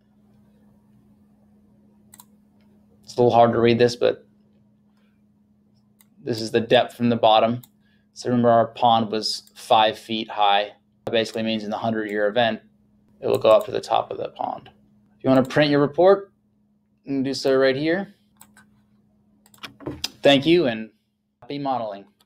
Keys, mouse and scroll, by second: 2.2 click, 6.0 click, 19.5 click.